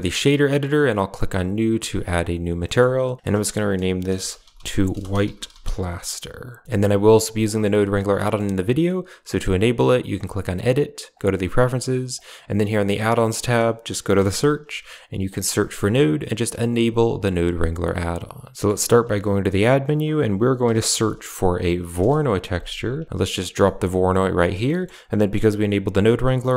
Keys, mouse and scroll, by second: 0.7 click, 1.8 click, 2.5 middle click, 3.1 click, 6.6-7.1 middle drag, 7.3 click, 7.6 click, 8.0 middle click, 10.0-11.5 drag, 19.1 shift+a, 23.5-23.9 middle drag, 24.0 click, 25.4 click.